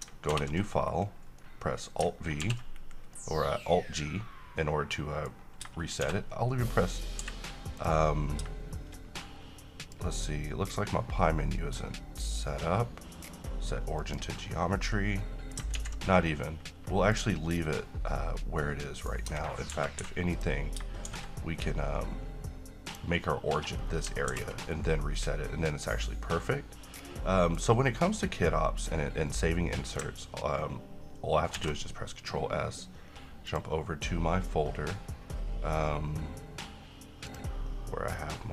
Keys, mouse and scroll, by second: 0.4 ctrl+v, 1.5-2.1 middle click, 2.6 alt+g, 3.3-5.4 middle drag, 6.1 shift+s, 7.3 Escape, 7.9 click, 9.9 click, 14.2 click, 15.3-15.9 middle click, 15.9 z, 16.2-16.8 middle click, 17.3 click, 19.0 middle click, 19.3 scroll up 1, 19.4 Tab, 19.8-20.2 typing, 20.5 click, 21.2 s, 23.0 click, 23.9 scroll down 1, 24.4 alt+g, 25.3-27.8 middle drag, 28.9 click, 31.7 ctrl+s, 33.6 click, 37.4 click.